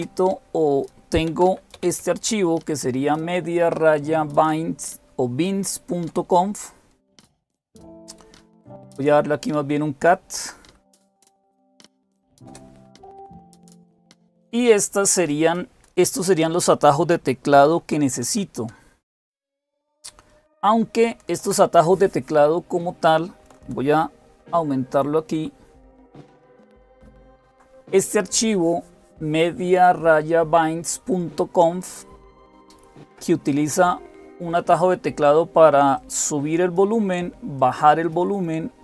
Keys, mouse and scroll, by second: 0.0-2.1 typing, 8.6-10.3 Left, 10.5 Left, 10.5 Delete, 10.7 Delete, 10.8 Delete, 11.1 Delete, 11.2-12.5 typing, 24.2 ctrl++, 24.8 ctrl++, 25.2 ctrl++, 25.6 ctrl++, 25.9 ctrl++, 35.8-37.0 drag.